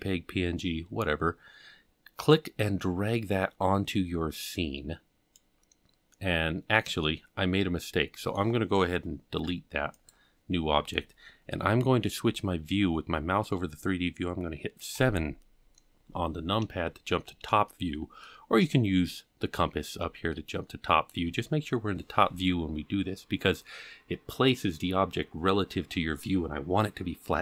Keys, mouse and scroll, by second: 2.3-5.4 drag, 6.1-6.9 scroll up 3, 7.0-9.3 middle drag, 9.4 x, 14.9 KP_7, 16.4 scroll down 1, 17.7-18.4 shift+middle drag, 20.3-21.1 shift+middle drag.